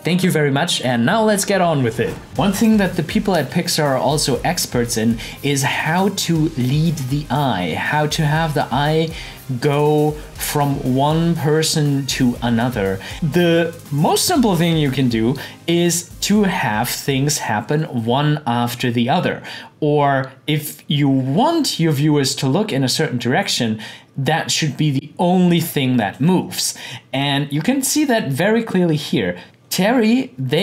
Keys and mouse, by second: 26.0-29.4 drag.